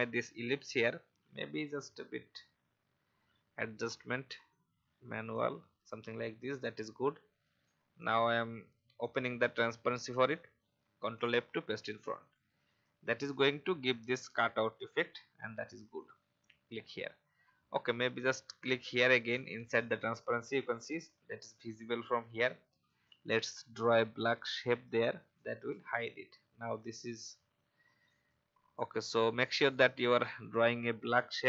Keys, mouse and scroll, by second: 1.7 Left, 4.5 shift+click, 8.0 click, 12.2 click, 14.6-15.9 alt+scroll up 1, 15.9-17.0 drag, 19.2 alt+scroll up 1, 20.0-21.0 drag, 22.6 n, 23.4-25.1 drag, 26.0 v, 26.7 click.